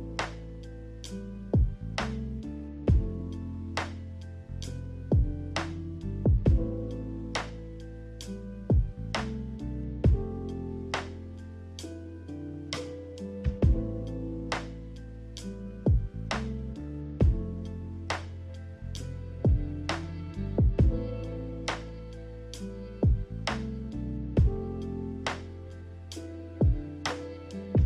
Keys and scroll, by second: 0.1 a, 0.8 a, 8.8-9.8 typing, 23.3 ctrl+z, 23.5 ctrl+z.